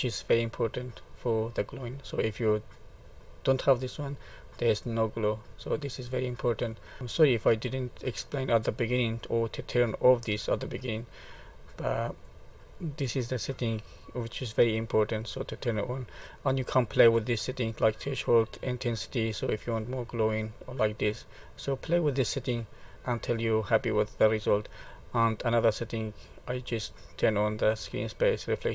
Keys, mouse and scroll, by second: 1.2 middle click, 2.9 click, 4.5 middle click, 5.7 middle click, 7.0 middle click, 11.4 middle click, 15.7 click, 19.4 click, 22.9 middle click, 26.3 click.